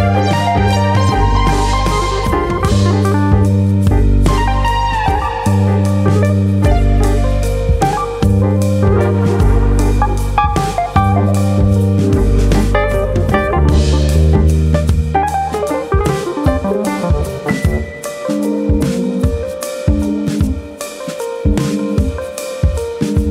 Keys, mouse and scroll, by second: 0.4 alt+s, 2.9 click, 3.0 middle click, 4.1 middle click, 4.8 click, 5.6 middle click, 7.4 click, 7.7 middle click, 8.6 click, 9.9 middle click, 10.5 middle click, 11.3 middle click, 12.2 click, 12.8 middle click, 13.4 click, 14.2 middle click, 14.9 click, 15.7 click, 16.5 middle click, 17.1 shift+middle click, 17.4 middle click, 17.8 click, 18.6 click, 20.2 1, 20.3 click, 21.1 click, 21.9 middle click.